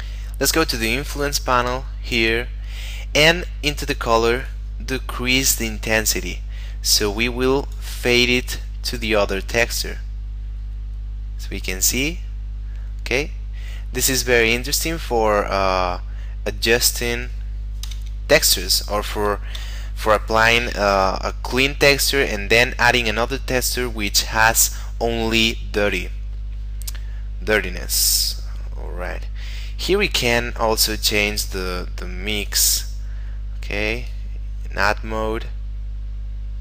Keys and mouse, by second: 4.5 click, 9.2 click, 17.9 F12, 19.6 Escape, 27.7 click, 30.8 click.